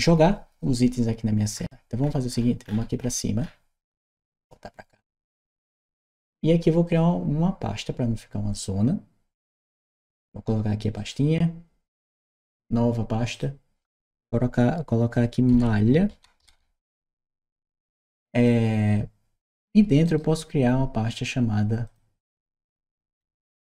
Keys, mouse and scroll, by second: 2.0 scroll up 1, 2.5 middle click, 3.0 middle click, 3.1 middle click, 4.1 click, 6.6 click, 8.3 click, 9.1 click, 10.7 right click, 13.1 click, 15.3 shift+m, 18.2 click, 19.3 click, 19.4 click, 19.8 right click, 21.7 click.